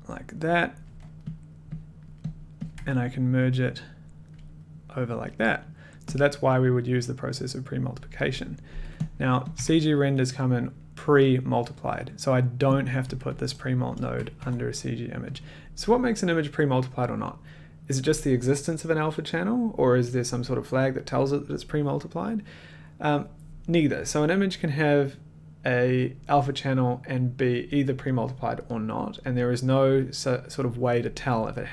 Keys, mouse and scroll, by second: 0.1 click, 0.6 middle click, 1.3 middle click, 2.0 click, 2.0-2.5 scroll, 2.3 click, 2.7 click, 2.7 1, 4.3 click, 5.9 middle click, 7.4 click, 9.0 click, 9.1 middle click, 9.5 click, 9.5 1, 12.8 click, 12.8 middle click, 13.3 click, 14.2 click, 14.4 1, 15.3 click.